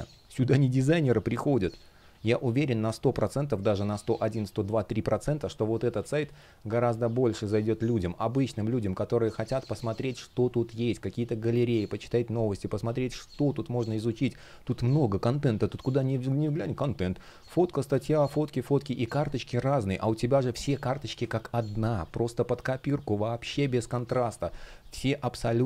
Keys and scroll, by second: 2.9 space, 5.7 space, 15.8 space, 25.3 space.